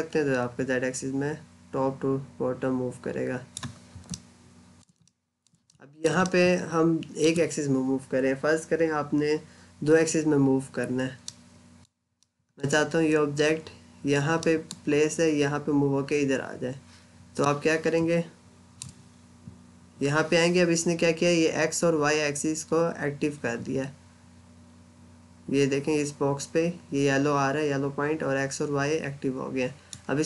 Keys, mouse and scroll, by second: 3.9 middle click, 4.9 middle click, 5.5 middle click, 6.1 middle click, 11.1 middle click, 11.9 scroll down 1, 12.0 middle click, 14.5 middle click, 17.3 middle click, 18.0 scroll up 1, 29.7 click.